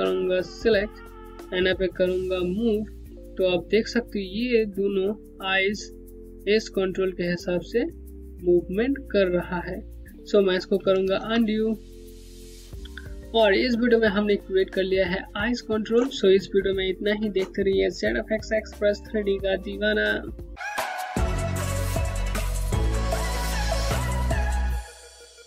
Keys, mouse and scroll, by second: 2.4 Home, 10.4 ctrl+Num_Lock, 10.7 ctrl+z.